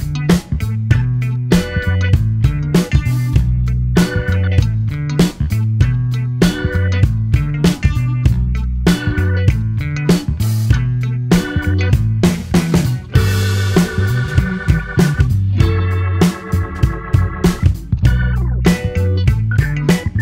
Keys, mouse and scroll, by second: 5.9-8.9 drag, 11.6 r.